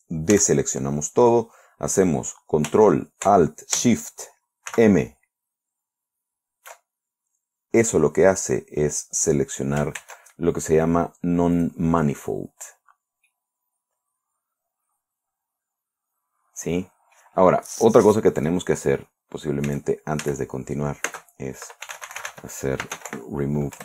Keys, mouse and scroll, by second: 0.8 a, 5.2 ctrl+alt+shift+m, 10.5 ctrl+Tab, 12.1 click, 13.7-17.8 middle drag, 20.1 a, 21.5-23.8 typing.